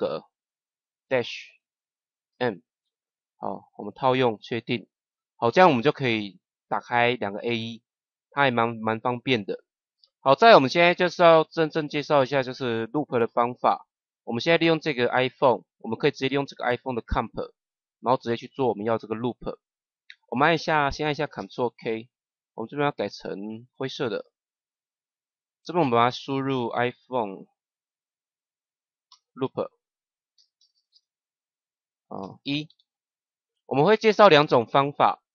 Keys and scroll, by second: 1.0 -, 2.2 m, 21.3 ctrl+k, 29.0 shift+-, 30.3 l, 32.6 1.